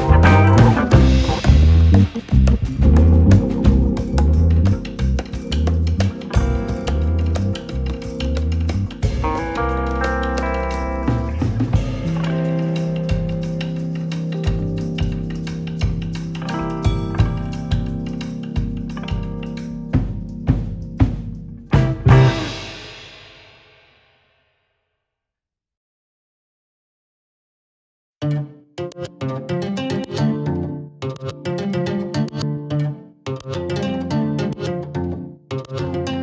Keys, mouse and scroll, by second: 0.2 click, 1.2 click, 1.6 click, 1.8-2.2 scroll up 2, 2.2 shift+middle click, 2.4 scroll up 1, 2.5 shift+middle click, 3.0 click, 4.5-5.5 drag, 5.9 ctrl+right click, 7.3 click, 7.6 KP_7, 9.8 click, 10.7 click, 11.0 shift+middle click, 11.8 click, 12.3 KP_7, 12.9 r, 13.6 g, 14.5 r, 15.6 g, 16.3 click, 16.8 g, 17.5 click, 17.8 r, 18.6 KP_1, 19.5 click, 20.2 r, 20.9-21.3 scroll up 1, 21.3 shift+middle click, 21.5 scroll up 1, 21.8-22.8 drag, 23.6 KP_7, 24.2 shift+middle click, 24.6 g, 26.0 r, 26.6 s, 28.1 scroll down 2, 28.2-29.2 middle drag, 29.2 shift+click, 30.3 click, 31.3 r, 32.5 click, 32.9 KP_7, 34.2 ctrl+right click, 34.7 r, 35.7 g.